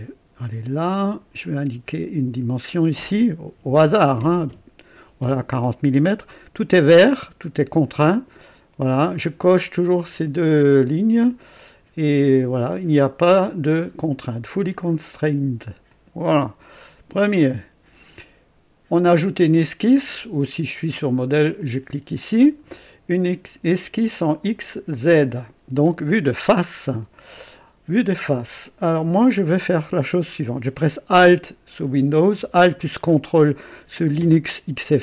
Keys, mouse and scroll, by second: 1.0 click, 2.5 click, 3.5 KP_4, 3.8 KP_0, 4.4 KP_Enter, 5.9 right click, 9.8 click, 10.6 click, 15.8 click, 17.1 click, 20.4 click, 21.6 click, 24.4 click, 25.3 click, 26.8 right click, 34.9-35.0 ctrl+alt+drag.